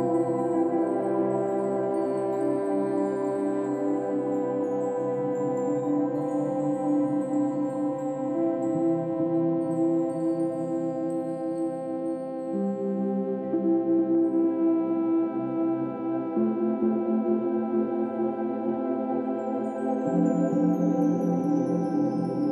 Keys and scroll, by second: 2.9 ctrl+-, 3.1 ctrl+=, 3.7 ctrl+-, 4.0 ctrl+-, 4.5 space, 12.8 ctrl+e, 13.7 ctrl+j, 14.0 ctrl+t, 14.4 ctrl+h, 15.8 Down, 16.2 Right, 16.4 Down, 17.0 Up, 17.1 Down, 17.2 Up, 17.3 Down, 19.5 ctrl+alt+g, 19.7 ctrl+alt+shift+n, 19.8 ctrl+alt+g, 20.3 ctrl+-, 20.4 ctrl+=, 20.6 ctrl+-, 20.7 ctrl+=, 20.9 space.